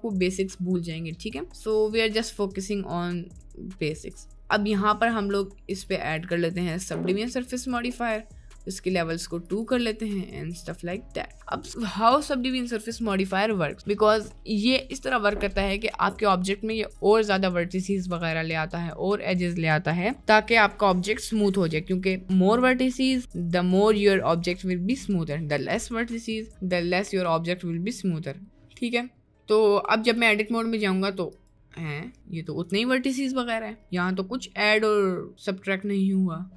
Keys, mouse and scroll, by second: 1.6 middle click, 4.3 middle click, 5.0 middle click, 5.8-8.0 drag, 9.5 click, 10.2-10.7 middle drag, 11.2 middle click, 28.8 middle click, 30.1 Tab, 30.5 right click, 31.4 click, 32.1 middle click, 32.7-33.2 right drag, 34.2-36.5 middle drag.